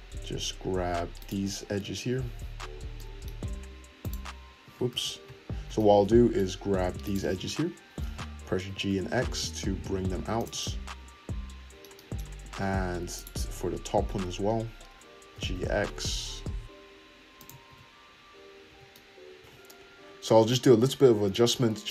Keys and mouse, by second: 1.7 `, 4.0-7.1 drag, 4.9 ctrl+z, 7.1 middle click, 7.4 `, 7.9-11.9 drag, 8.6 g, 11.9-13.1 middle drag, 13.1 click, 13.2-17.4 middle drag, 13.5 `, 14.1 `, 15.3 g, 17.4-21.3 drag, 17.6 `, 18.6 Tab, 20.3 `, 21.1 Tab, 21.3-21.9 middle drag.